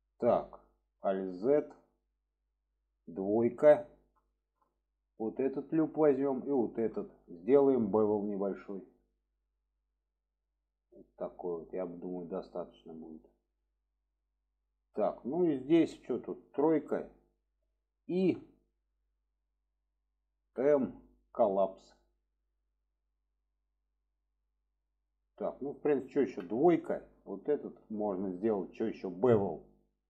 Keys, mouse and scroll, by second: 1.1 alt+z, 1.5 middle click, 3.5 2, 5.2 alt+shift+click, 6.4 click, 8.9 click, 9.9-13.6 drag, 14.2-14.8 middle drag, 17.0-22.0 drag, 22.0-23.4 middle drag, 23.8-24.3 middle drag, 26.7 click, 27.4 click, 29.6-30.0 drag.